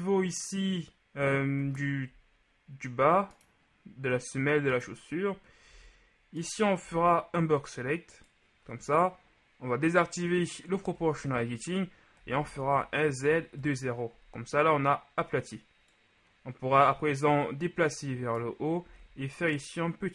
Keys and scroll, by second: 5.8 z, 6.9 b, 11.1 i, 12.4 s, 12.6 z, 13.3 KP_0, 13.6 Return, 19.1 shift+s.